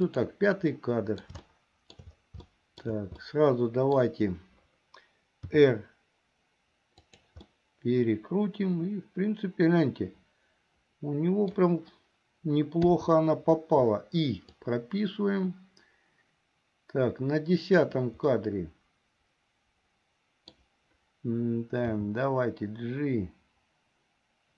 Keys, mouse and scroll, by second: 0.2 click, 0.9 middle click, 1.6 shift+middle click, 2.7 shift+middle click, 3.4 middle click, 5.6 r, 7.6-11.7 middle drag, 11.7-13.0 scroll down 1, 13.0 i, 14.7-18.0 drag, 18.5-20.7 middle drag, 22.1 g.